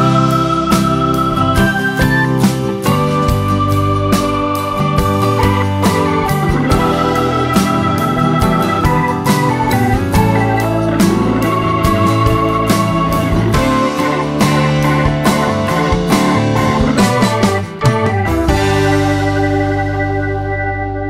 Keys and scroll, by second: 18.2 BackSpace, 20.6 BackSpace.